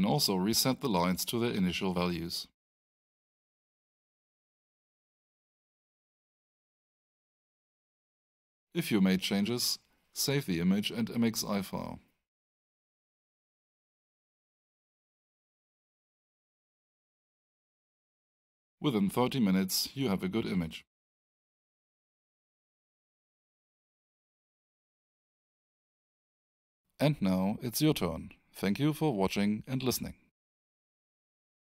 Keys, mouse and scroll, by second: 3.1 click, 5.0 click, 9.2-9.8 scroll up 1, 10.6 click, 16.1-17.0 scroll up 1, 17.1 click, 18.2 scroll up 1, 19.0 click.